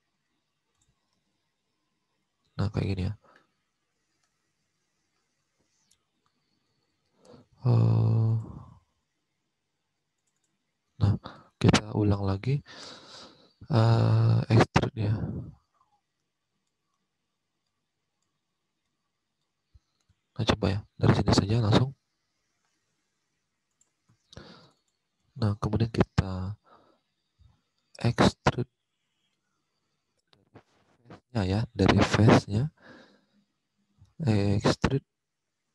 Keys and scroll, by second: 16.4 ctrl+z, 17.4 ctrl+z.